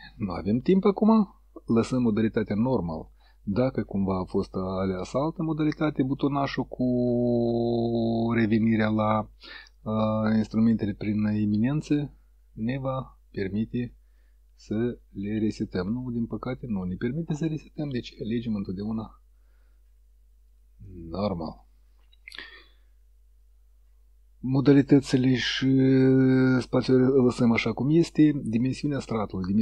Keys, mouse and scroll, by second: 3.5 click, 4.7 click, 6.2 click, 9.9 click, 12.0 click, 13.0 click, 13.9 click, 14.7 click, 16.7 click, 18.7 click, 19.7 click, 20.6 click.